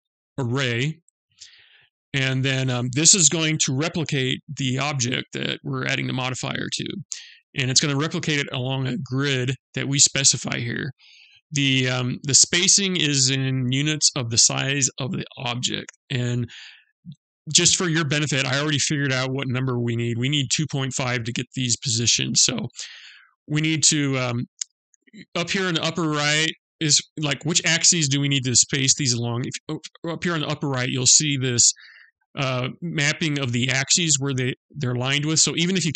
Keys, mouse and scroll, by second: 0.0 click.